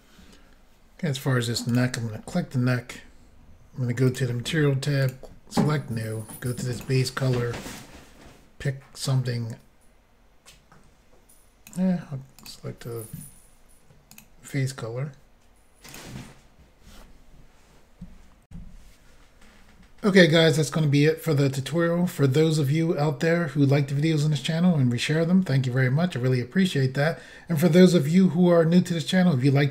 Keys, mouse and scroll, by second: 1.7 click, 1.8 click, 4.1 click, 5.1 click, 6.8 click, 7.8 click, 12.4 click, 12.5 click, 14.2 click, 14.2 click, 15.9 click, 16.0 click, 18.5 Insert.